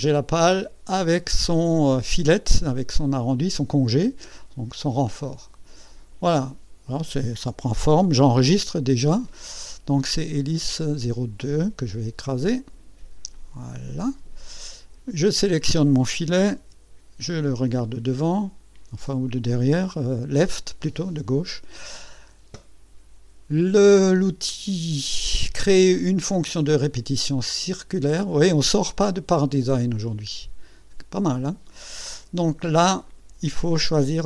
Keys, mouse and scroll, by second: 2.7-7.1 drag, 8.8 ctrl+s, 10.6 click, 12.3 click, 13.3 click, 15.1 click, 16.6 KP_6, 17.8 scroll up 2, 18.1-18.4 scroll down 2, 19.0 right click, 29.8 click, 33.1 click.